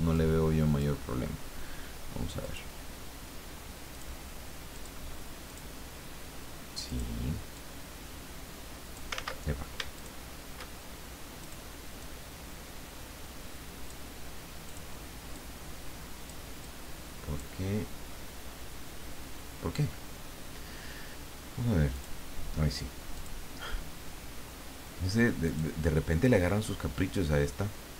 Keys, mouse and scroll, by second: 0.1 click, 2.4 click, 3.9 click, 4.7 click, 5.5 click, 6.8 click, 7.6-9.1 drag, 9.1 ctrl+z, 10.0 shift+click, 11.4 click, 12.0-14.2 drag, 14.7 click, 15.3-16.5 drag, 16.6-17.9 drag, 21.9 click, 23.1 click, 25.4 click, 26.3-27.9 drag.